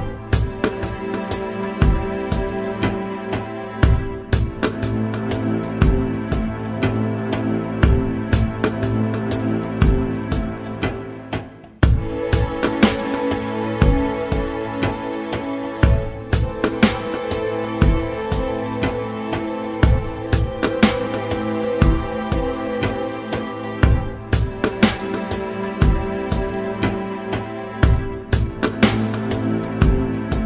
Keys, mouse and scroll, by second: 4.7 Down, 6.0 Down, 7.8 Down, 9.3 Down, 13.8 Down, 16.7 Up, 20.4 Down, 21.0 Down, 23.7 Down, 24.7 Down, 25.3 Down, 26.8 Down, 29.2 Down, 30.0 Down.